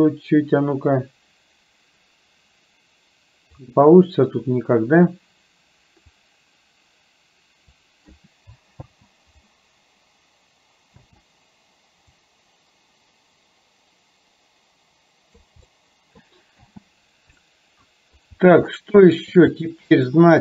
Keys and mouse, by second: 6.3-7.9 drag, 8.9 space, 11.1 space, 12.4-15.5 drag, 15.6 middle click, 16.6 space, 17.4 middle click, 18.8 shift+middle click, 19.9 shift+middle click.